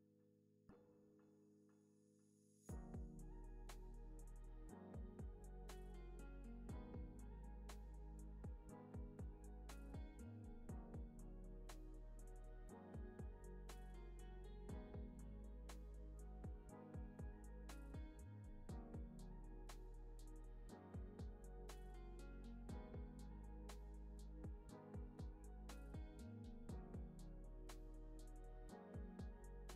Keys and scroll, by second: 0.0 alt+z, 2.2 alt+z, 3.0 alt+x, 5.3 alt+x, 6.1 alt+z, 6.8 alt+x, 23.7 u.